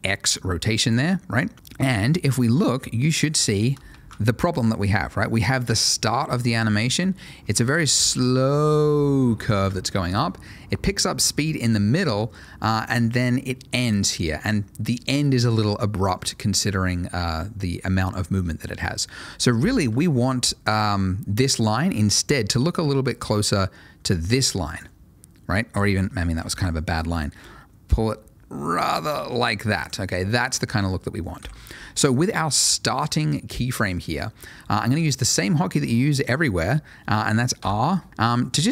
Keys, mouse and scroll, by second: 0.8 double click, 1.5 click, 1.8 middle click, 4.0 ctrl+shift+a, 7.2 click, 16.8 ctrl+shift+a, 22.8 click, 25.7 Escape, 26.5 ctrl+shift+a, 27.4 click, 31.4 Escape, 32.1 click, 37.6 r.